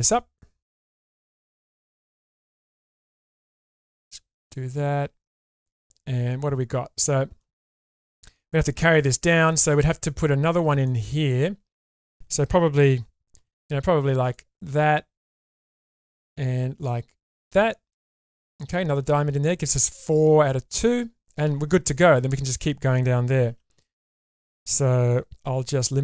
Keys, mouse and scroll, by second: 0.3 middle click, 1.6 click, 2.3 click, 3.1 click, 3.5-4.5 drag, 4.7 click, 5.7-7.4 middle drag, 7.7 scroll down 1, 7.9 middle click, 10.7 scroll down 1, 10.9-12.1 middle drag, 13.3 k, 18.5 click, 21.5 scroll up 1, 23.5 2, 24.2 click, 25.4 x.